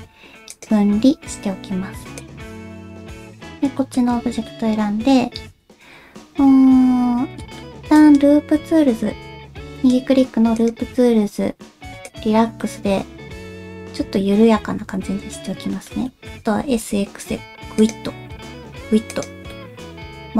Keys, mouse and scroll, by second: 1.5 Tab, 3.8 shift+middle click, 4.2 Tab, 4.5 middle click, 5.4 a, 5.7-7.6 middle drag, 8.3-12.6 right drag, 12.6-15.3 middle drag, 15.7 shift+middle click, 16.1 middle click, 16.6 s, 19.7-20.3 middle drag, 19.7 s.